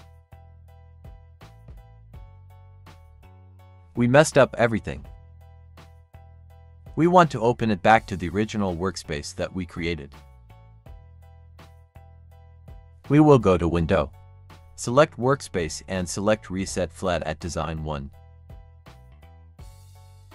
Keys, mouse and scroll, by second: 5.7-8.5 drag, 8.8 click, 14.3 click, 20.1 click.